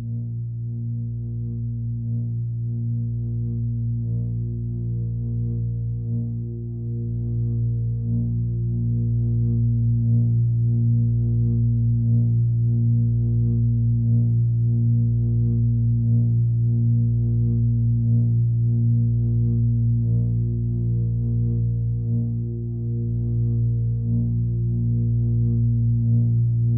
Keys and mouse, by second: 0.8 click, 1.5 click, 1.9 click, 6.2 click, 7.0-7.8 drag, 8.0 click, 8.7 click, 9.3 click, 10.8 4, 11.0 Return, 12.7 click, 13.6-15.1 drag, 17.8-18.6 ctrl+alt+drag, 18.8-19.1 ctrl+alt+drag, 20.3 alt+r, 21.4 r, 21.7 x, 21.8 x, 22.7 click, 23.3 7, 23.9 r, 24.3 z, 26.0 click.